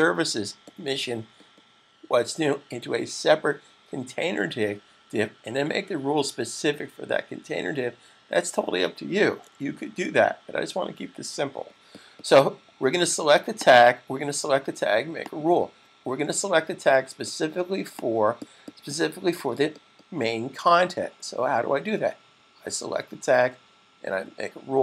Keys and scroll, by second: 9.8 super+s.